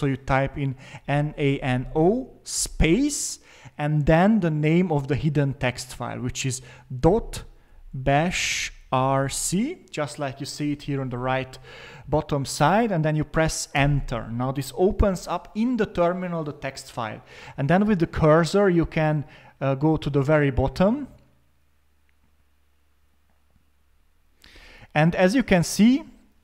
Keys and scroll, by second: 0.7-2.5 typing, 4.0-4.7 typing, 6.7-9.7 typing, 13.7 Return, 18.7-24.5 Down.